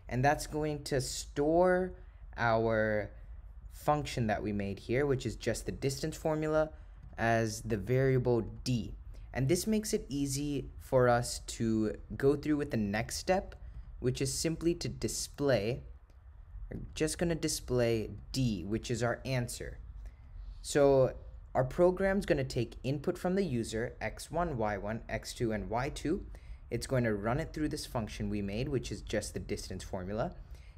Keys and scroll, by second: 10.0 Return, 13.8 Right, 15.2 3.